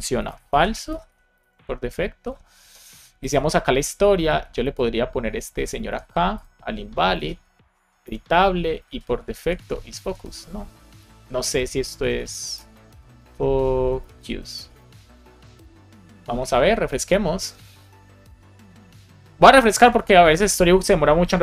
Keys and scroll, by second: 0.1 shift+;, 0.2 shift+space, 1.3 super+s, 5.8 super+c, 6.8 Return, 7.1 super+v, 7.9 Return, 8.8 super+v, 9.3 alt+Left, 9.9 Right, 10.9 BackSpace, 11.5 BackSpace, 12.4 shift+f, 14.5 super+s, 16.0 super+r.